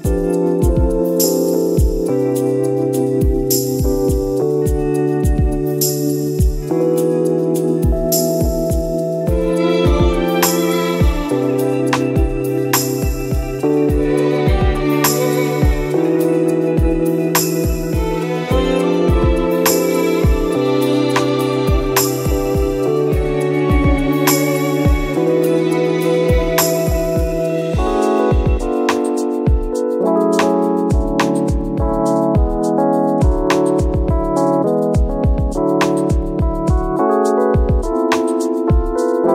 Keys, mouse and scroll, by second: 0.4 click, 2.5 scroll down 1, 2.8 alt+a, 2.8 scroll up 1, 3.1 scroll down 1, 3.3 click, 3.4 scroll up 1, 4.0 scroll down 1, 4.8 click, 6.1 scroll down 1, 6.6 click, 8.4 a, 9.0 z, 9.2-9.6 scroll down 1, 9.6 u, 9.8 Tab, 10.0 z, 10.0-10.6 scroll up 1, 10.6 click, 12.0 scroll up 1, 12.2 scroll down 1, 13.9 KP_0, 14.8 click, 14.8 scroll down 1, 15.0 scroll up 1, 15.2 click, 15.7 alt+a, 16.1 scroll down 1, 16.6 scroll up 1, 18.2 click, 20.1 scroll down 1, 21.0 scroll down 1, 21.3-21.6 scroll up 1, 21.6 click, 26.9 scroll down 1, 27.6 scroll up 1, 28.2 click, 30.1 click, 31.0 alt+a, 31.0 scroll down 1, 31.4 scroll up 1, 32.3 click, 34.4 alt+a, 35.6 click, 36.0 Tab, 36.1-36.8 scroll up 2, 37.2 alt+click, 37.4 2, 37.5 scroll down 1, 38.2 alt+click, 39.1 alt+shift+click.